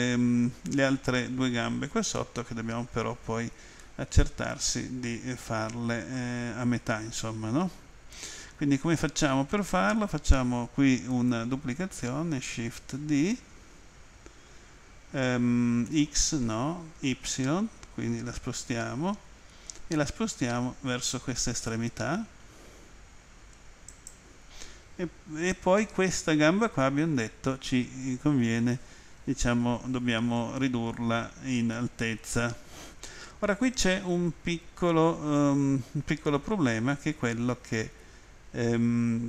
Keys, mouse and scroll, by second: 3.8 middle click, 15.9 x, 23.9 click, 25.8 middle click.